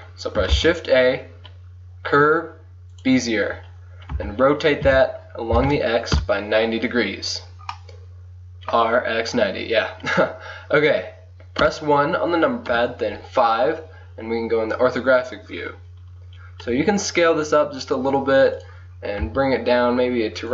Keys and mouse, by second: 0.6 shift+a, 4.2 r, 7.5 click, 11.7 KP_1, 12.8 KP_5, 16.8 s, 19.3 g.